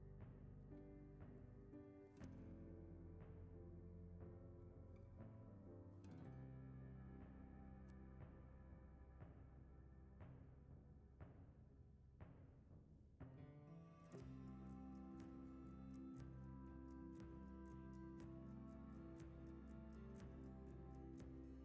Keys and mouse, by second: 0.5 middle click, 2.1 alt+shift+click, 2.4-4.0 middle drag, 4.3 middle click, 5.3 s, 9.1 s, 10.6 s, 11.7 right click, 13.2 KP_1, 14.0-14.4 shift+middle drag, 14.8 Tab, 16.4 ctrl+b, 20.5 Tab.